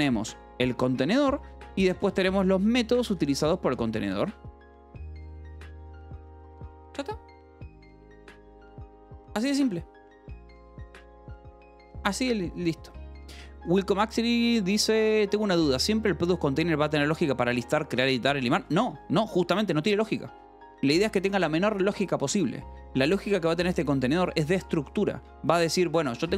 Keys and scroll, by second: 1.1 Escape, 1.5 k, 2.1 j, 3.0 Escape, 3.4 k, 3.9 k, 4.4 Escape, 18.4 Escape, 23.7 shift+v, 24.2 Escape, 25.6 j, 25.9 l.